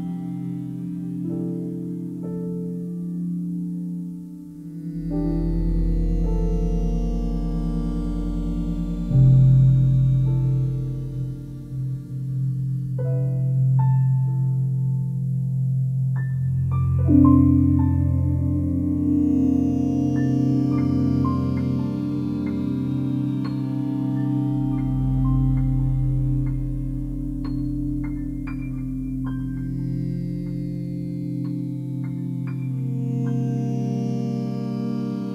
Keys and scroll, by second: 2.8 Delete, 16.5 i.